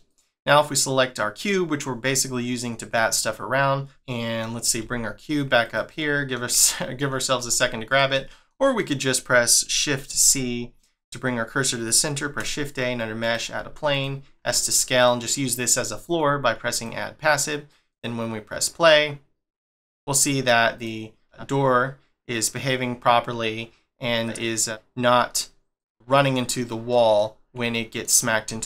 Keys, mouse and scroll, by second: 0.1 click, 3.8 middle click, 4.8 g, 5.9 middle click, 7.4 g, 8.1 middle click, 8.8 middle click, 10.1 shift+c, 10.9-12.2 scroll down 1, 12.2 shift+a, 13.6 s, 15.8 shift+middle click, 16.7 click, 17.9 click, 19.9 middle click, 20.7 click, 21.2 g, 25.9 middle click, 26.8 middle click, 27.3 scroll up 1, 27.7 shift+middle click, 28.5 g.